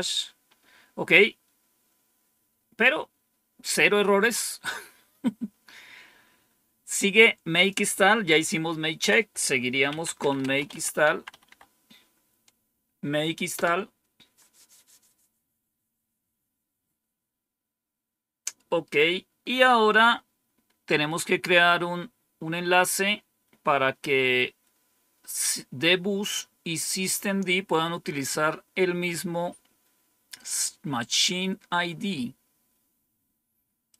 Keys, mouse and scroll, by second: 7.5 click, 8.2 Up, 8.9 Down, 9.6-11.9 typing, 33.8-33.9 drag.